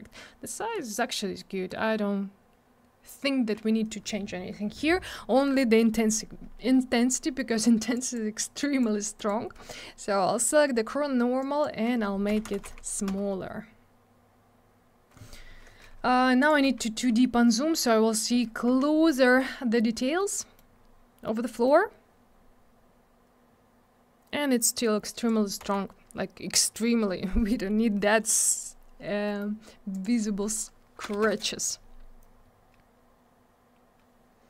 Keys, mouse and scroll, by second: 1.4 middle click, 7.2 middle click, 7.4 middle click, 8.0 click, 8.1 click, 8.6 click, 9.2 click, 9.3 click, 11.4 click, 12.3 0, 13.1 Return, 16.4 click, 16.5 click, 17.1 scroll up 1, 18.2 click, 18.2 click, 19.6-20.2 scroll up 1, 20.2 middle click, 20.7 scroll up 1, 21.3 middle click, 25.2 click, 25.3 click, 25.6 m, 29.3 middle click, 29.4 middle click, 29.9 click, 30.0 click, 31.1 BackSpace, 31.1 2, 31.2 Return.